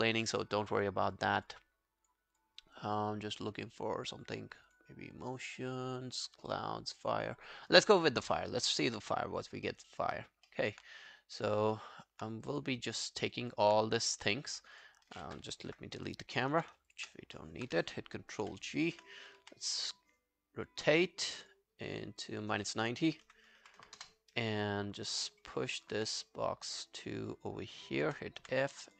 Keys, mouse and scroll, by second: 2.4 double click, 8.8 double click, 9.7 alt+middle click, 10.1 alt+right click, 10.5 alt+middle click, 11.8 alt+middle click, 12.0 alt+right click, 13.0-13.4 alt+scroll down 1, 13.4 alt+click, 16.9 shift+click, 17.4 alt+middle click, 18.4 ctrl+g, 23.0-24.3 typing, 25.2 alt+middle click, 25.6 alt+scroll down 1, 25.8 alt+click, 26.0 w, 28.2-28.9 typing, 28.8 alt+scroll down 1.